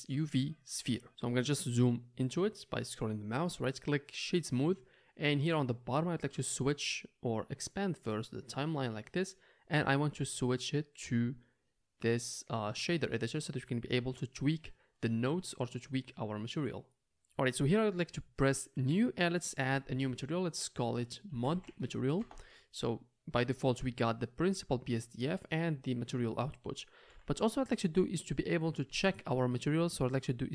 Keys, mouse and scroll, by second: 3.6-10.9 right drag, 8.2-10.9 drag, 13.0 click, 13.0 right click, 14.9-16.7 middle drag, 23.9-25.1 middle drag, 27.0 n.